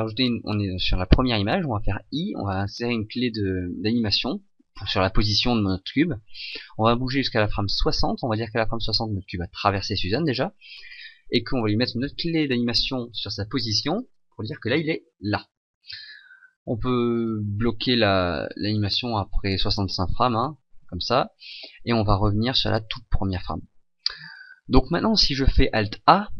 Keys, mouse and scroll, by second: 2.0 i, 7.7 click, 8.8 click, 17.2 click, 22.6 click, 26.0 alt+a.